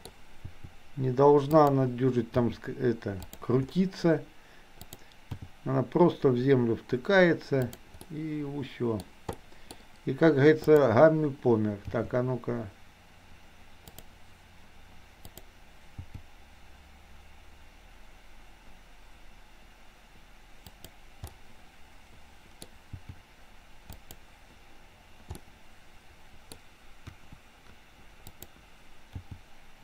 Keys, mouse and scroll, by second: 0.5 r, 2.4 g, 4.8 click, 5.4 g, 8.0-9.0 middle drag, 9.3-9.7 scroll up 1, 9.7-10.9 scroll down 1, 10.9-12.0 scroll down 1, 12.0 g, 15.4 click, 16.0 g, 21.3-22.7 middle drag, 22.9 g, 25.4-26.5 middle drag, 27.0 KP_1, 29.0 g.